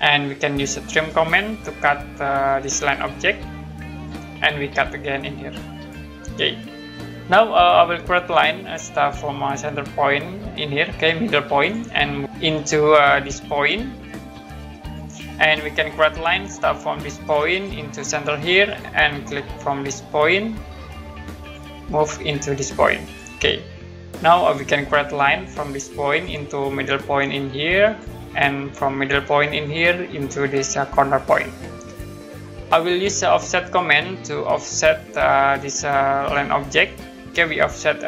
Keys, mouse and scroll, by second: 0.9 click, 1.5-2.0 scroll down 1, 3.9 click, 5.7 click, 8.6 click, 11.6 click, 14.8 click, 17.2 click, 18.6 click, 21.4 click, 23.0 click, 26.1 click, 27.8 click, 29.6 click, 31.1 click, 33.6 click, 34.4-34.8 scroll up 1, 34.9-36.3 scroll down 1, 36.6 click.